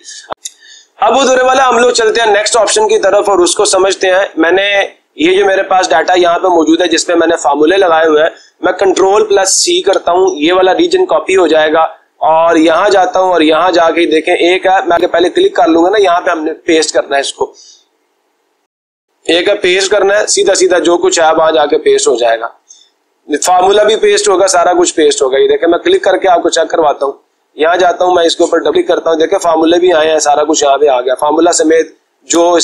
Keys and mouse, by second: 5.5-6.7 drag, 7.3 click, 9.5 ctrl+c, 12.9-13.9 drag, 16.0 click, 16.5 click, 18.5 click, 25.4-26.5 drag, 27.5 click, 27.8 click, 28.6 click, 28.8 click, 30.8-31.8 drag, 32.5 Escape.